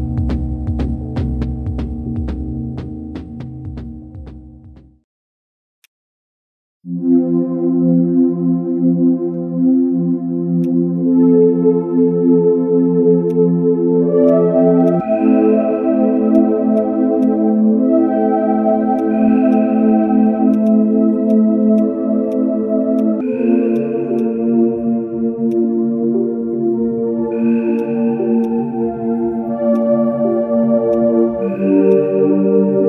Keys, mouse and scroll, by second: 2.9 ctrl+shift+space, 4.5 ctrl+shift+space, 10.6 ctrl+shift+click, 14.1 ctrl+z, 14.8 ctrl+shift+click, 16.7 ctrl+z, 17.2 ctrl+shift+click, 20.5 right click, 25.5 shift+click, 28.4 shift+click, 30.9 shift+click.